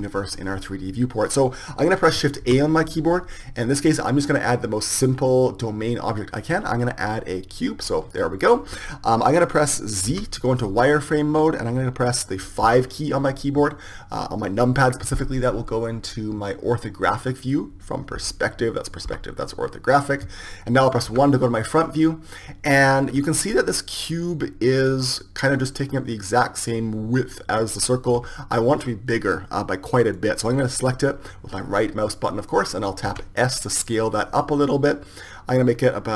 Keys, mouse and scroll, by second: 12.8 KP_5, 18.4 KP_5, 21.4 KP_1, 28.6 KP_1, 33.6 s.